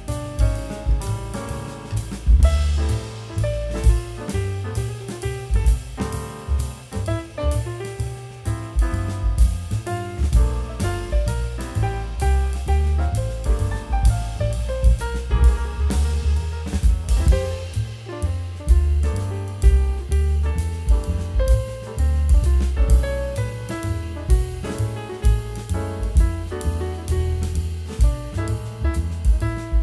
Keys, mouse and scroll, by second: 0.5 scroll up 1, 0.9 z, 1.1-1.5 scroll down 2, 1.2 z, 1.5 e, 2.8 scroll up 1, 3.1 middle click, 5.1 shift+click, 6.3 e, 7.0 middle click, 7.2-7.6 scroll down 1, 7.8-8.3 scroll up 1, 12.3 middle click, 12.5 w, 12.8 shift+click, 13.7 scroll down 1, 14.3 scroll up 1, 14.4 scroll down 1, 17.5-17.9 alt+scroll up 2, 17.7 F3, 17.9 scroll down 1, 18.0-18.8 scroll, 18.8 w, 19.8 middle click, 19.9 scroll down 1, 20.0 middle click, 20.5 scroll down 1, 20.7 shift+click, 22.1 scroll down 1, 22.3 middle click, 22.9 scroll down 1, 23.1 middle click, 23.2-23.9 scroll up 2, 23.3 middle click, 23.9-24.3 scroll down 1, 24.4 Delete, 24.9 Delete, 25.2-25.6 scroll down 1, 25.6 middle click, 26.6-27.3 scroll up 1, 27.5-28.1 scroll down 2, 27.8 Delete, 28.3 z, 28.5 scroll up 1, 28.7 middle click, 29.0 scroll down 1.